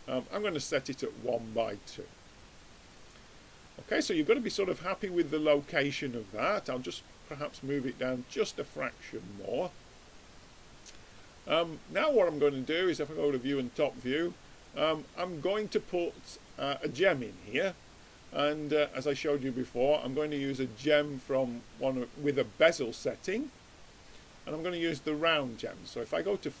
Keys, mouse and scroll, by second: 0.8-2.6 middle drag, 6.7-8.2 drag, 8.2-9.6 middle drag, 10.5-12.9 middle drag, 12.9-14.7 drag, 18.3 click, 20.4 click, 21.8-23.7 drag, 22.9-25.5 middle drag, 25.5-26.6 drag.